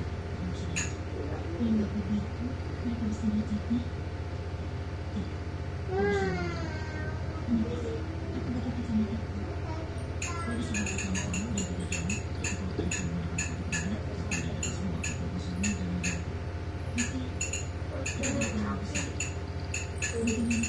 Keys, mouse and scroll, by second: 0.2 click, 1.7 click, 7.0 click, 12.3 click, 16.0 click, 17.3 click, 18.4 click, 19.7 click.